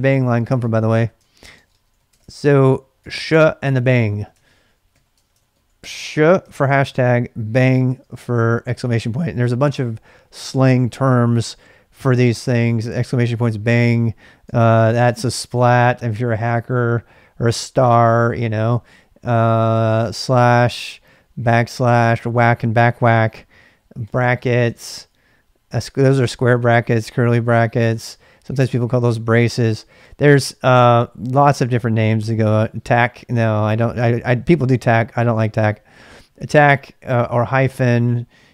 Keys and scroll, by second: 0.0-6.4 typing, 1.2 ctrl+c, 3.8 Return, 5.1 Return, 5.3 ctrl+[, 7.5 typing, 14.5 typing, 20.1 typing, 21.4 typing, 24.0-24.6 typing, 26.4 typing.